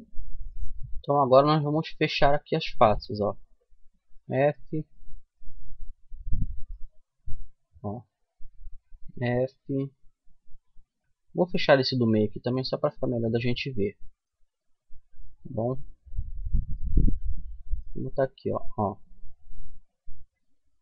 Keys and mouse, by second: 1.4-2.4 drag, 3.3 f, 4.3-5.4 middle drag, 8.2 f, 12.3 f, 13.1-19.6 middle drag, 19.6-20.8 right drag.